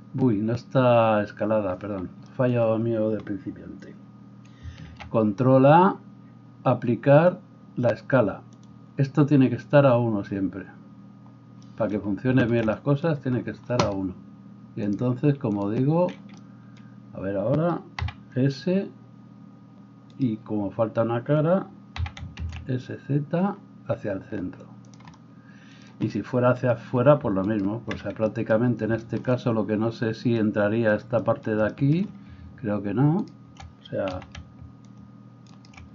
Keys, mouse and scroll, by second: 4.9 ctrl+a, 14.9-25.0 drag, 18.0 s, 22.0 s, 25.0-27.5 middle drag, 27.5 alt+right click, 27.7-35.9 alt+middle drag, 33.2 shift+click, 34.1 c.